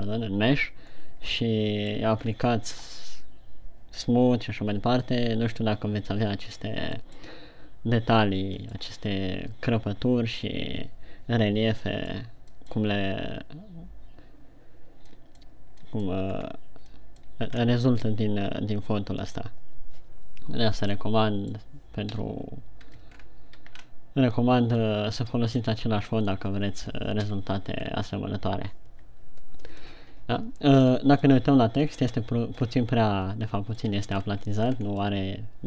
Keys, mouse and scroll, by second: 21.6 middle click, 22.5 KP_1, 23.7 shift+scroll down 3, 24.3 scroll up 2, 25.5 middle click, 26.4 middle click, 27.7 KP_1, 28.4 scroll down 2, 31.4 scroll up 3, 31.8 middle click, 34.6-35.3 scroll up 4, 35.3 scroll down 1, 35.4 middle click.